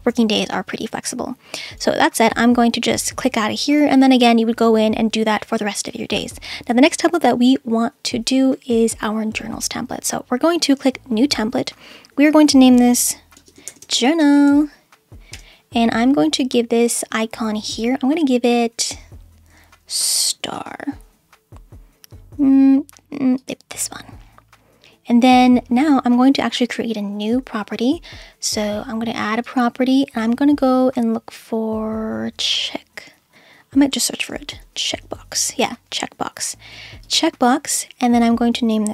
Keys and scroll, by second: 12.7 shift+Caps_Lock, 13.4-15.3 typing, 19.7-21.2 typing, 34.1-35.0 typing.